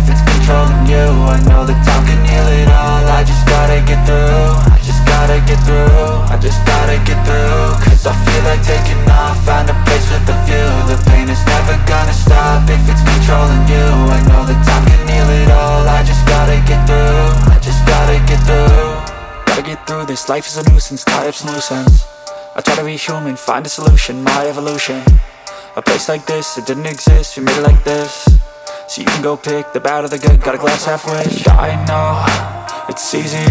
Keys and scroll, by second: 3.3 shift+Page_Up, 3.5 ctrl+Page_Down, 5.5 ctrl+z, 7.8 c, 8.3 Escape, 8.8 F2, 13.1 space, 13.7 c, 14.0 Escape, 17.9 ctrl+z, 18.0 Delete, 22.8 space, 25.1 ctrl+Page_Down, 27.1 F3, 27.7 Escape, 28.0 F2.